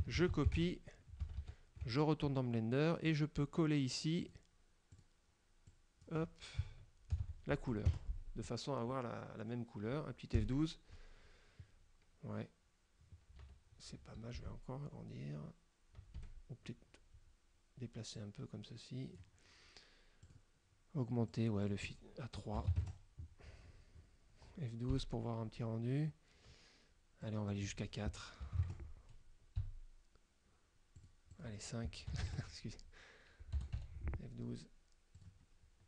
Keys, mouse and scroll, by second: 0.3 ctrl+c, 0.7 ctrl+alt+Tab, 1.3 alt+Tab, 3.2 click, 4.3 click, 5.0 click, 5.8 click, 7.2 ctrl+v, 8.0 KP_Enter, 10.4 F12, 13.4 Escape, 13.9 scroll down 2, 14.4 s, 16.3 Escape, 18.3-19.5 drag, 20.4 click, 21.4 click, 21.7 click, 22.6 BackSpace, 22.8 KP_3, 22.9 KP_Enter, 23.8 scroll up 2, 25.0 F12, 27.3 click, 28.5 BackSpace, 28.6 KP_4, 29.7 F12, 31.1 click, 31.4 click, 32.2 BackSpace, 32.3 KP_Enter, 33.6 Return, 33.9 F12, 35.3 click.